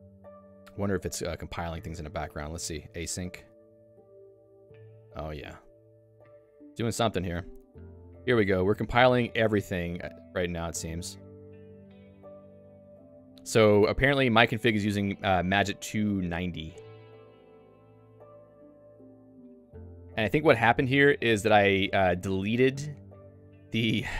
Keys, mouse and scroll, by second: 2.4 ctrl+alt+u, 4.3 Return, 5.5 shift+g, 6.7 shift+g, 23.3 Return.